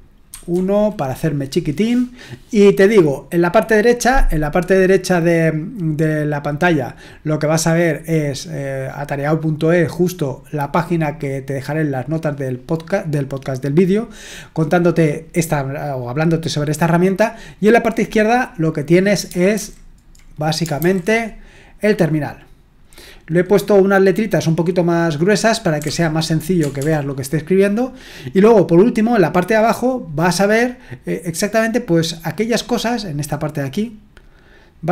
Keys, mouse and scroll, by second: 0.3 ctrl+1, 19.5 super+h, 20.8 super+h, 25.8 typing.